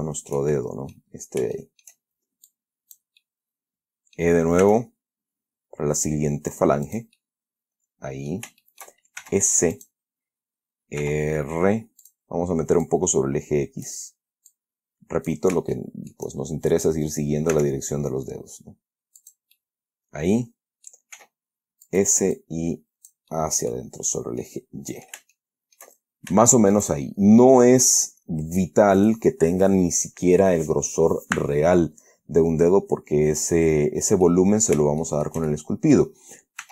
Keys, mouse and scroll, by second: 0.2-1.4 shift+middle drag, 1.9 shift+middle click, 2.8 click, 3.5-4.7 middle drag, 4.9 e, 7.2 click, 7.5-8.8 middle drag, 8.9 shift+middle click, 9.5 shift+s, 10.1 shift+click, 11.3 r, 12.3 click, 13.2-14.4 drag, 14.8 click, 16.0-16.6 shift+middle drag, 17.8 e, 19.5 click, 19.9-21.4 middle drag, 21.5 s, 22.2 click, 22.7 click, 23.6 middle click, 24.4 scroll down 2, 24.7 middle click, 25.7 shift+middle click, 26.3-26.8 shift+scroll down 2, 26.8 shift+middle click, 27.3 shift+scroll up 2, 28.2 right click, 29.3 right click, 34.2 scroll down 1, 34.6 middle click, 35.3-36.5 shift+middle drag.